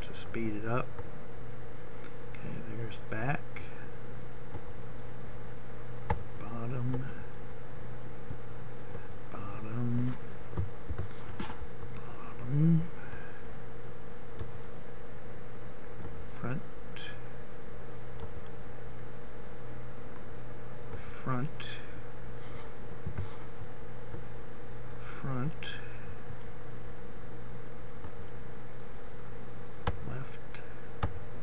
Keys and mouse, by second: 5.3-8.5 drag, 8.7 right click, 10.9 ctrl+KP_7, 23.2 KP_1, 24.7-26.6 middle drag, 28.9-31.4 drag.